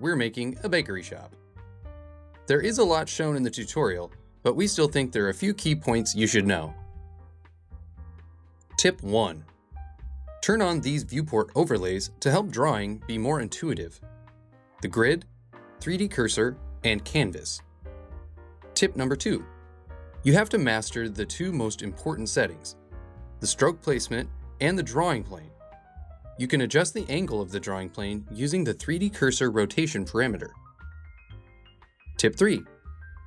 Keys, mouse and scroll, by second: 7.6-12.1 drag, 13.6-17.7 drag, 19.0 click, 20.0 click, 20.2 middle click, 20.6 click, 21.1 click, 21.4 middle click, 21.8 click, 22.5 middle click, 23.0 click, 23.9-25.5 drag, 25.6 click, 25.9 middle click, 26.2 click, 26.6 middle click, 27.1 super+middle click, 27.5 click, 27.8 click, 28.2 middle click, 28.6 click.